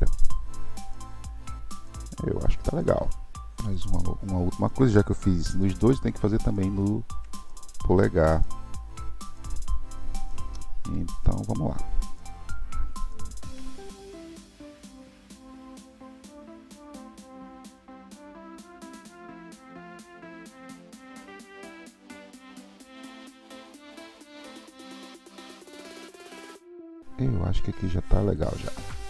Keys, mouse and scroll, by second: 0.1-3.1 middle drag, 3.6 alt+z, 3.6-6.6 middle drag, 6.8-10.4 shift+middle drag, 13.4 KP_1, 13.9 l, 14.0 click, 14.2 l, 14.8 KP_7, 16.5 shift+d, 18.7 KP_1, 20.0 s, 21.2 click, 21.9 click, 22.9 KP_3, 23.9 click, 24.5 click, 25.3-26.3 middle drag, 26.5 click, 28.7 scroll up 5.